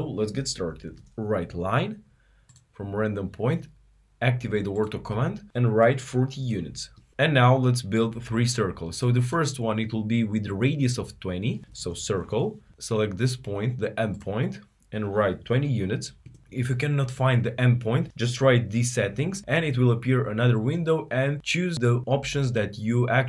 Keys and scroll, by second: 0.2-1.0 typing, 11.4-12.1 typing, 18.3 typing.